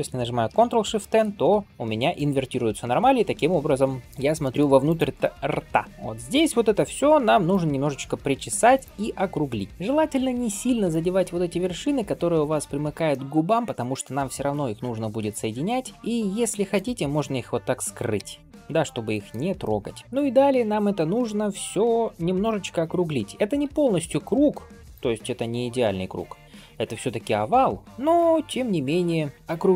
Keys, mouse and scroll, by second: 0.7 ctrl+shift+n, 1.6 click, 1.7-2.0 scroll up 2, 2.0-4.0 middle drag, 4.3 shift+middle click, 4.7 click, 5.1 middle click, 6.6 g, 8.6 click, 9.7 middle click, 10.8 click, 12.5 scroll up 1, 13.0 shift+middle click, 15.6 scroll down 2, 15.9 middle click, 18.0 h, 19.0 shift+middle click, 19.5 middle click, 20.5 click, 21.3 g, 22.6 click, 23.5 g, 29.3 click.